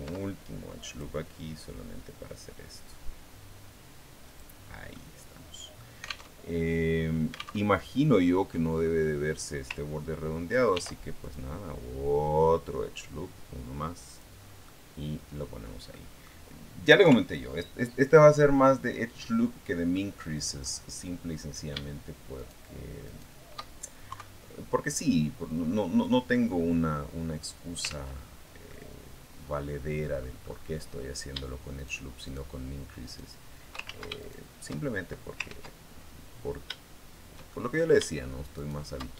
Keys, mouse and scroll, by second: 0.7 click, 4.0 click, 4.8-5.8 middle drag, 6.1 alt+Tab, 7.4 alt+Tab, 7.6 alt+middle click, 8.6 scroll up 1, 10.5 ctrl+r, 11.0 ctrl+click, 13.8 click, 14.2 scroll down 1, 14.4 middle click, 15.6 scroll down 1, 15.7 middle click, 16.8 KP_3, 18.1-18.6 scroll up 1, 19.0 scroll up 1, 19.8 middle click, 21.2 right click, 22.2 shift+right click, 22.8 shift+right click, 23.9 KP_3, 25.8-27.8 drag, 27.6 ctrl+z, 28.5-30.2 drag, 31.6 shift+right click, 32.0 shift+right click, 32.8 shift+right click, 33.6 ctrl+shift+z, 34.0 ctrl+shift+right click, 35.2 ctrl+z, 35.6-36.0 ctrl+scroll up 3, 37.3 shift+middle click, 38.4 shift+right click.